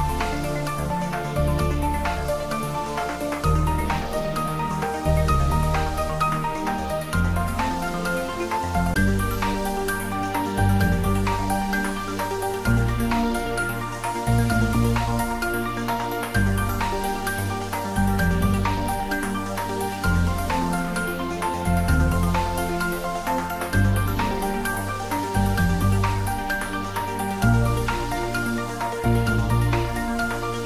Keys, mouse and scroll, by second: 1.1 click, 3.4 shift+d, 3.7 z, 6.0 click, 6.4-7.8 typing, 10.5 click, 11.3 g, 14.0 click, 17.3-19.1 scroll up 1, 19.9 y, 23.1 click, 25.9-27.5 typing, 28.7 click, 30.5 g.